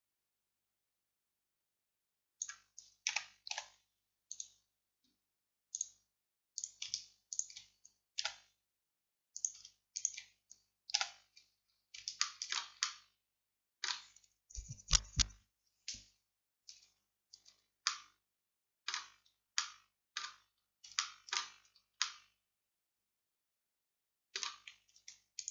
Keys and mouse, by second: 3.6 x, 5.8-8.3 right drag, 8.3 f, 9.4-11.0 drag, 11.0 f, 11.7 middle click, 23.8-25.5 drag.